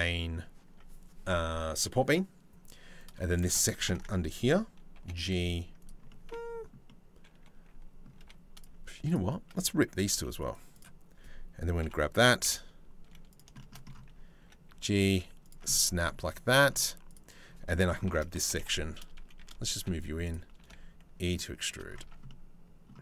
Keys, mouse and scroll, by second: 3.5 ctrl+l, 4.6 g, 5.7 click, 6.5-7.6 drag, 7.8 2, 8.2 click, 9.8 v, 11.4 ctrl+l, 12.0 KP_7, 12.1 middle click, 12.7 z, 13.2 shift+middle click, 14.0 e, 15.3 middle click, 15.8 z, 16.7 click, 17.7 ctrl+l, 18.0 g, 20.2 e, 21.7 Tab, 21.9 middle click, 22.9 Tab.